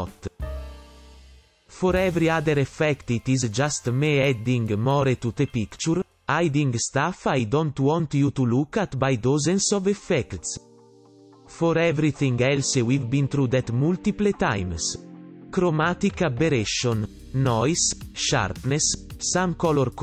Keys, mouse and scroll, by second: 3.0 right click, 4.2 ctrl+alt+], 4.7 right click, 5.6 right click, 8.4 right click, 9.5 right click, 11.9 right click, 12.3 right click, 17.4 right click, 17.7 right click, 18.8 right click, 18.9 right click, 19.5 ,.